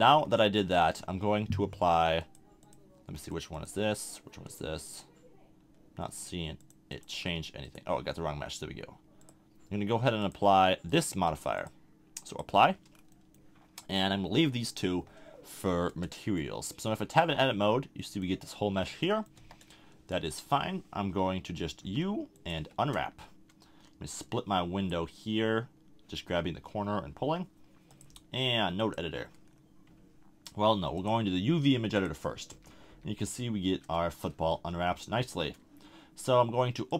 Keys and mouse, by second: 2.2-7.6 drag, 12.9-15.7 drag, 15.7 middle click, 15.9 Tab, 19.3 KP_1, 21.8 u, 24.2 click, 32.5 n, 32.9 n, 36.9 click.